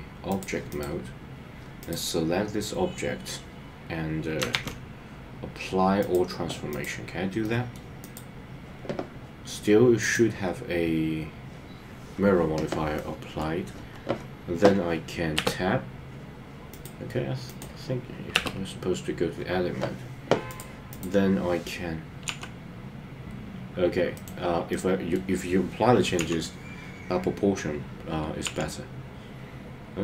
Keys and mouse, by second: 0.7 click, 1.8 click, 4.6 a, 7.4 middle click, 12.9 middle click, 15.4 Tab, 16.7 click, 17.4 click, 18.3 Tab, 24.1 right click, 24.7 middle click, 26.2 KP_3, 28.4 i.